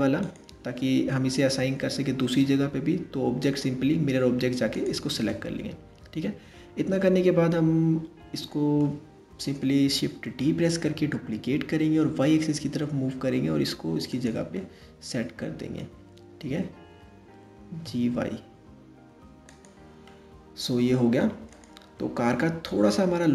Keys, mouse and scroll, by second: 3.0 click, 4.9-7.9 middle drag, 8.8 scroll down 1, 10.2 shift+d, 14.2-17.2 middle drag, 17.2 g, 19.7-21.1 middle drag, 21.1 click, 21.9-23.3 middle drag.